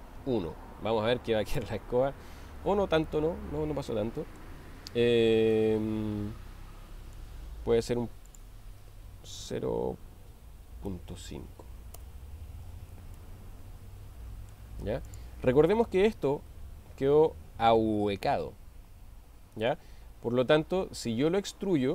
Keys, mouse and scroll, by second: 3.1-4.4 middle drag, 5.7-7.3 middle drag, 8.3-12.8 drag, 13.2-14.7 middle drag, 15.1 click, 16.5 g, 19.6 right click.